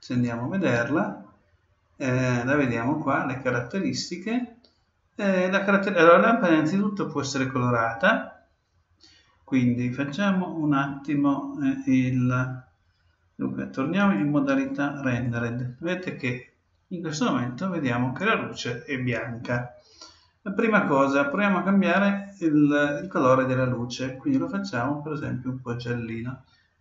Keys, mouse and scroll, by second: 2.5-4.4 drag, 14.0-15.7 drag, 22.8-24.6 drag.